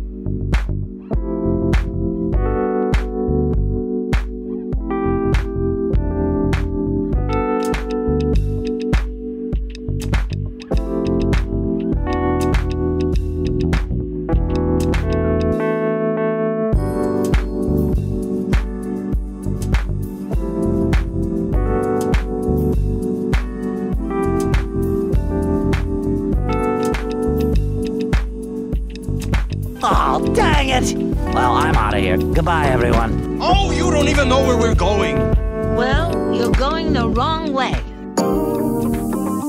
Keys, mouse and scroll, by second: 0.8 Tab, 1.5 shift+middle click, 2.1 click, 2.5 shift+click, 3.1 g, 3.1 g, 4.2 click, 4.6 click, 5.1 shift+click, 5.8 g, 5.8 g, 6.6 click, 7.3 middle click, 8.0 Tab, 8.7-11.3 drag, 11.8-13.1 middle drag, 22.6-24.1 drag, 24.4 click, 25.3-25.9 middle drag, 26.3 middle drag, 26.8 Tab, 28.0 click, 28.4 click, 28.7 shift+click, 29.0 middle click, 29.3 click, 30.1 click, 30.9 g, 31.1 y, 33.0 click, 33.3 click, 33.9 shift+click, 34.9 s, 35.1 x, 37.0 click, 37.6 g, 37.9 z.